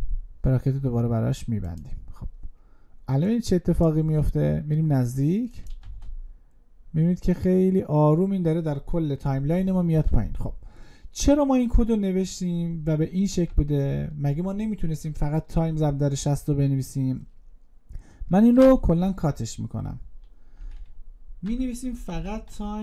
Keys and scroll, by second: 18.2 ctrl+x.